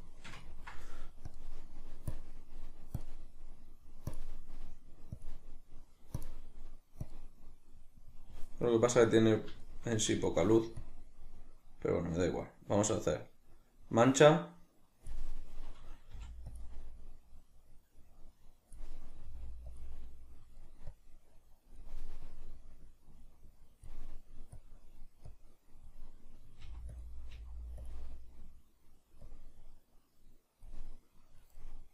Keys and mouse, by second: 1.3-8.7 drag, 8.7-10.8 middle drag, 10.8-16.6 drag, 19.2 click, 19.2 f, 20.1-21.0 middle drag, 21.0-27.0 drag, 26.6 f, 27.4 f, 27.9 click, 31.0-31.9 middle drag.